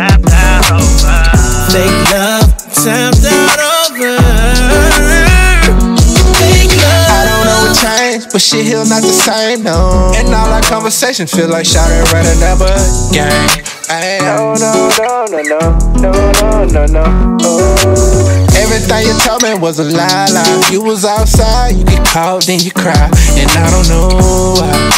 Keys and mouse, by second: 0.0 click, 0.8 click, 1.1 click, 2.2 click, 7.3 click, 7.7 click, 9.4 click, 11.0 click, 12.4 click, 13.3 click, 14.5 click, 15.7 click, 16.3 click, 16.9 click.